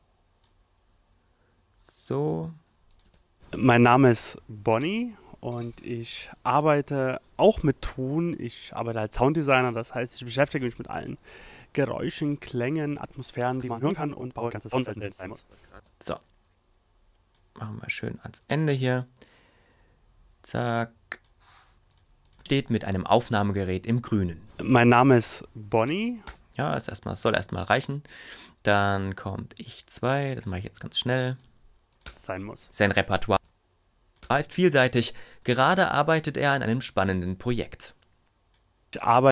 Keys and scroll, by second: 3.0 space, 13.6 ., 15.5 ., 15.7 space, 22.4 space, 26.2 space, 33.3 space.